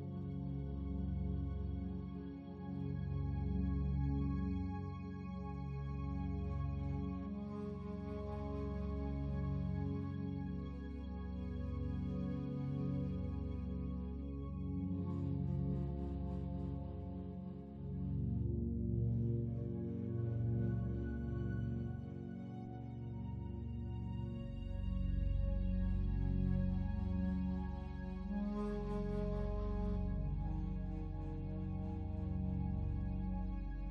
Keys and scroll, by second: 2.2 ctrl+z.